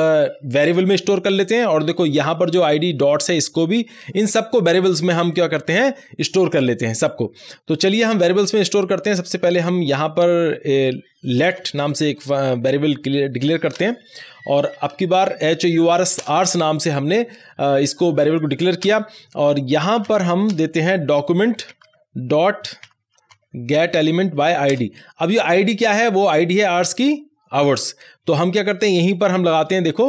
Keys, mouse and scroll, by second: 1.4 scroll down 1, 3.2 click, 4.4-5.2 scroll down 1, 5.2-6.6 drag, 6.6 scroll down 1, 8.2-9.2 scroll up 1, 9.2 click, 11.3-15.9 typing, 16.1 Return, 18.7 Return, 18.8 space, 20.0 =, 20.4 space, 21.5-23.7 typing, 24.3 Down, 24.7 Return.